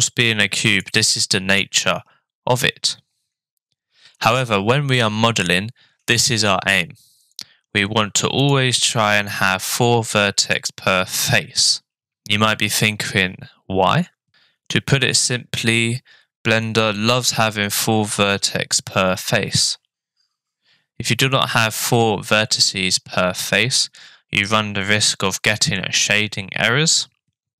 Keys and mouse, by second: 8.4 click, 9.5 click, 10.5 click.